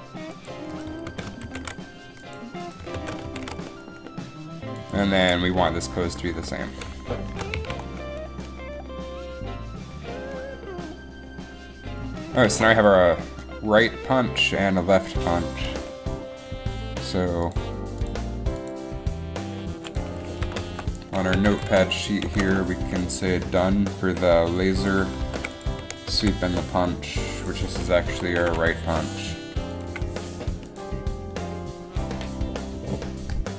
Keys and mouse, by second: 1.2 ctrl+c, 1.7 ctrl+shift+v, 3.1 ctrl+c, 3.5 ctrl+shift+v, 7.4 shift+Left, 7.7 alt+a, 12.7 alt+a, 13.2 alt+a.